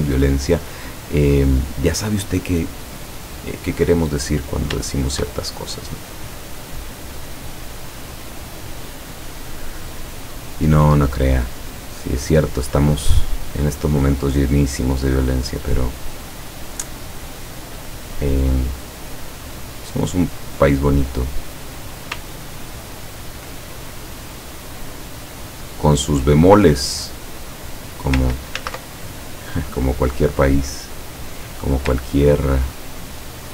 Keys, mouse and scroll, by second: 3.4-4.3 drag, 4.8 shift+click, 5.7-7.2 drag, 7.3 click, 7.8 click, 13.2 click, 13.8-16.3 drag, 16.8 click, 17.7 click, 19.3 click, 22.7-23.2 ctrl+scroll up 2, 24.4-26.0 drag, 26.7 click, 28.6 ctrl+z, 29.1 ctrl+click, 29.6-31.2 ctrl+drag, 32.4 ctrl+scroll down 2.